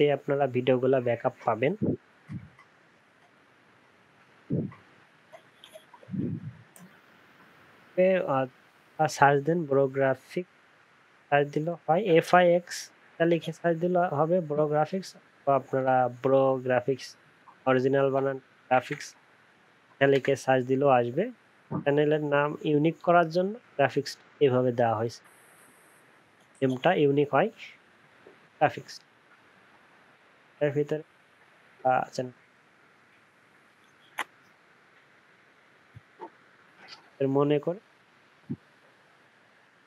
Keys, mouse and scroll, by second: 5.7 ctrl+a, 5.9 ctrl+c, 5.9 typing, 36.3 ctrl+c, 36.3 typing, 37.0 ctrl+v.